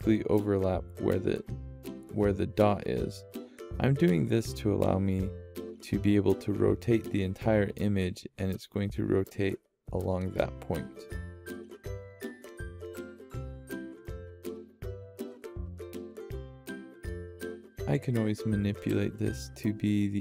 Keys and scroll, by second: 0.0 =, 13.1 =, 13.2 =, 13.4 =, 14.6-15.0 -.